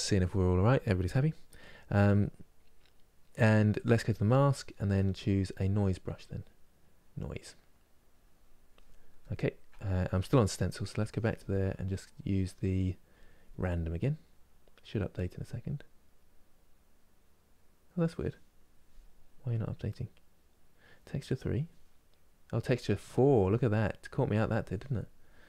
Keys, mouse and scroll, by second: 9.0-25.4 ctrl+middle drag.